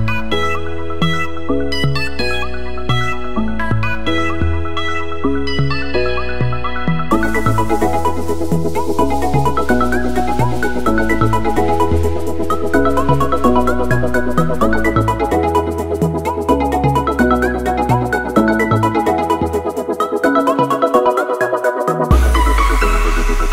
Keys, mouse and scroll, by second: 13.2 click.